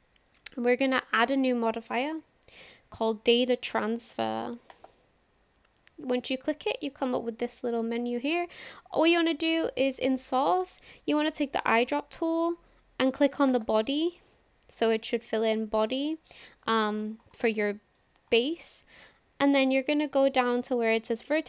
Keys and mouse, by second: 1.2-5.2 drag, 11.5 click, 17.7 shift+middle click.